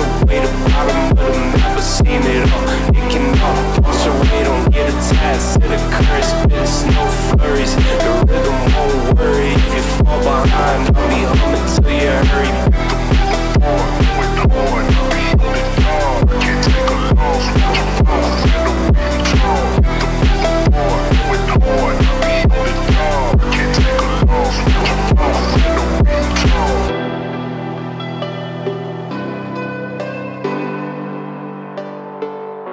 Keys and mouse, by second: 0.7 click, 1.3 click, 3.1 click, 3.5 click, 4.3 middle click, 5.1 click, 5.4 shift+click, 7.0-8.2 drag, 9.1-10.6 middle drag, 11.5 click, 13.0 alt+click, 14.6 e, 16.4 s, 19.1 r, 19.8 g, 20.6 s, 23.3 click, 24.3 click, 27.0 s, 31.1-32.3 drag.